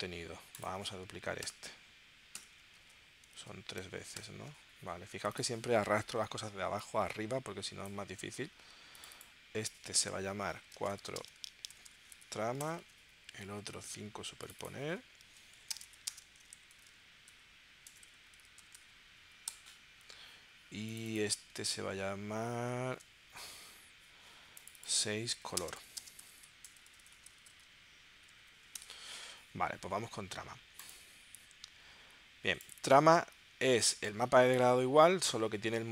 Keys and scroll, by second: 1.4 super+j, 2.3 super+j, 2.8 super+Tab, 3.4 super+Tab, 4.2 super+j, 10.6-12.2 typing, 12.6 Return, 12.8 super+Tab, 13.7 super+Tab, 15.6-19.2 typing, 19.5 Return, 21.5 super+Tab, 22.9 super+Tab, 25.5-28.4 typing, 28.8 Return.